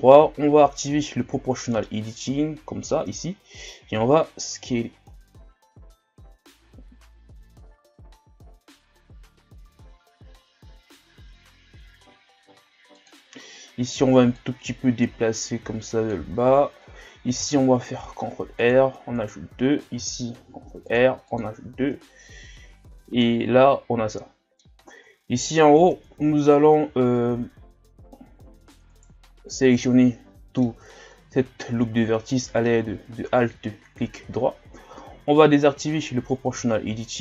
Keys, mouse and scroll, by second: 1.1 o, 3.4-3.7 scroll up 1, 3.9 s, 14.4-17.4 drag, 17.4 ctrl+r, 20.0 ctrl+r, 21.9 Tab, 22.4 a, 22.8-23.2 scroll down 2, 23.2-24.8 middle drag, 24.8-25.4 shift+scroll up 8, 25.8 Tab, 26.5-28.9 shift+scroll up 3, 28.9 alt+right click, 29.7-30.9 middle drag, 30.9 shift+scroll up 2, 32.7 shift+scroll up 1, 33.7 scroll up 1, 35.8 click, 36.8-37.2 shift+scroll up 1.